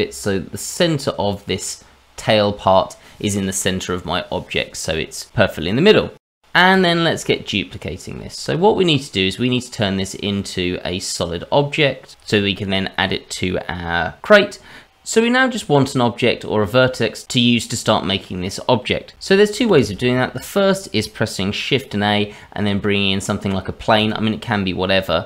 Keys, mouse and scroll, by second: 4.0-4.8 scroll down 3, 4.8-6.1 scroll down 1, 6.1-6.7 scroll down 4, 6.7 click, 7.3-8.2 scroll up 3, 8.2-9.1 scroll up 3, 19.7 shift+a.